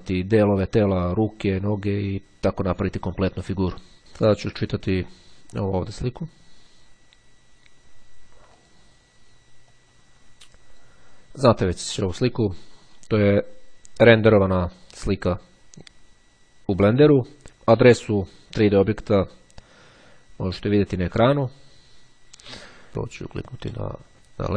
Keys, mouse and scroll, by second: 5.2-6.3 drag, 8.7 click, 9.9-11.4 drag.